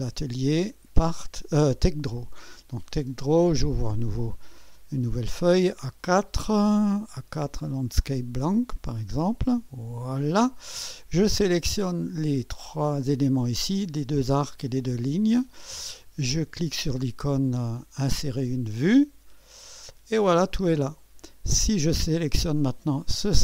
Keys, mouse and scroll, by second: 0.1-2.4 drag, 3.5 click, 8.0 click, 9.5 click, 11.8 click, 15.0 click, 18.3 click, 19.5 click, 20.5-21.1 scroll up 3.